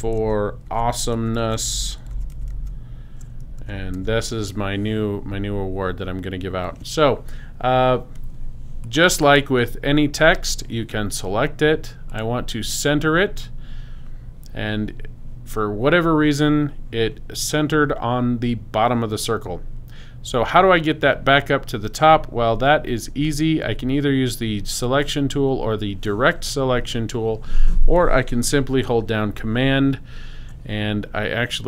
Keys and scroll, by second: 0.0-3.6 typing.